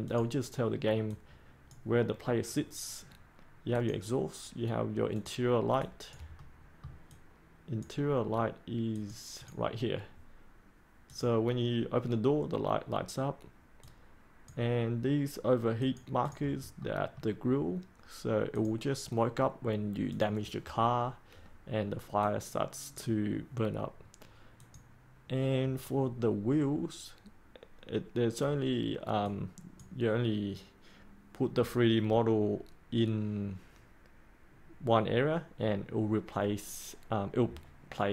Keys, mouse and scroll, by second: 6.3 middle click, 7.0-8.5 drag, 16.7 middle click, 18.5-23.7 drag, 25.8-26.5 scroll up 1, 29.1-38.1 drag.